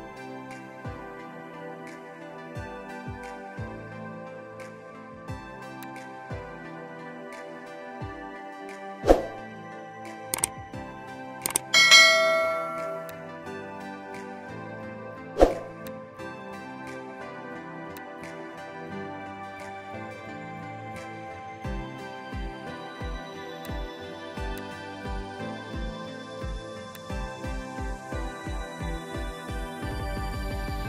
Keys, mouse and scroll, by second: 11.5 ctrl+m, 23.5 alt+click, 25.5 ctrl+m.